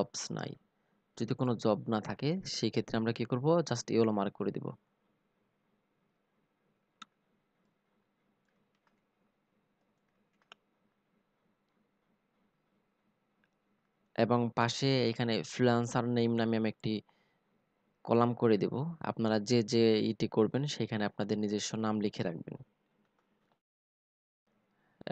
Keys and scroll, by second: 7.3 ctrl+c, 8.8 ctrl+v.